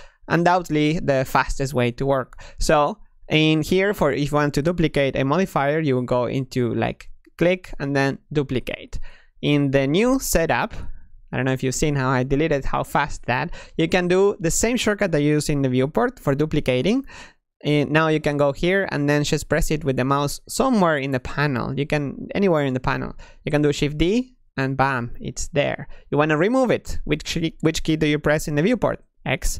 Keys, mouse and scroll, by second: 6.7-9.7 drag, 10.2 x, 16.7 shift+d, 23.7 shift+d, 28.9 x.